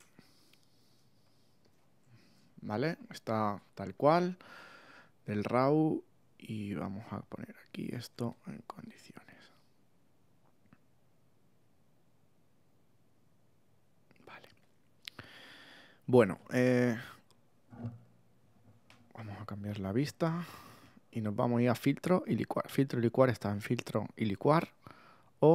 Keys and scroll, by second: 0.0 Tab, 1.0 space, 2.0 super+space, 2.4 super++, 14.5 space, 19.4 f.